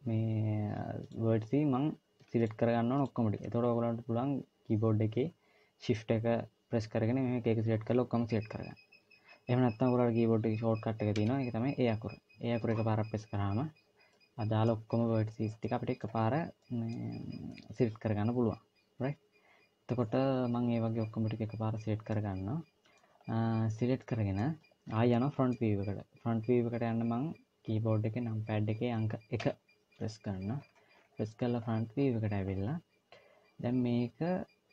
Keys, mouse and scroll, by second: 0.8 click, 2.2 shift+click, 2.7 shift+click, 10.9 a, 13.8 scroll down 1, 13.9 middle click, 15.5 middle click, 19.8-21.9 scroll down 2, 21.9 middle click, 22.9-23.9 scroll up 2, 23.9 middle click, 24.9 middle click, 29.2 KP_1, 30.4-31.4 scroll down 11, 31.4-31.8 scroll up 5, 32.1-32.9 scroll up 5, 32.9-33.9 scroll up 1.